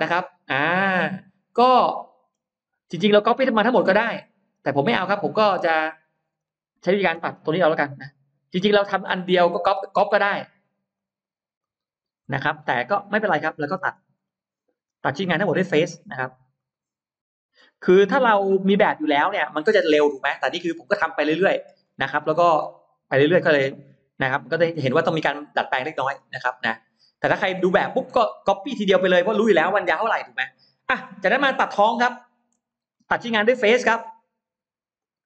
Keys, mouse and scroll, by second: 0.4-0.7 scroll down 1, 0.8-2.1 middle drag, 0.8-1.2 scroll up 1, 4.0-5.2 middle drag, 6.0 click, 7.0 space, 7.2 click, 7.9 ctrl+click, 8.4 middle click, 8.7 scroll up 1, 9.2 ctrl+click, 10.0 ctrl+click, 10.8 ctrl+click, 11.4 ctrl+click, 12.2 scroll up 2, 12.8 middle click, 12.8 scroll up 2, 13.2 scroll down 2, 13.6-14.3 scroll up 4, 16.4 click, 17.4 click, 17.9-18.2 scroll down 2, 18.5 middle click, 18.7-19.2 scroll down 3, 19.2 middle click, 19.7-21.2 scroll down 3, 20.9 middle click, 21.7-22.7 scroll up 4, 23.0-23.3 scroll down 2, 23.3-23.6 scroll up 2, 23.7-24.3 scroll down 2, 24.3 middle click, 25.7-26.6 scroll up 4, 30.8-31.6 scroll up 4, 31.5 middle click, 32.6-33.3 scroll up 4, 33.5 middle click, 34.8 click.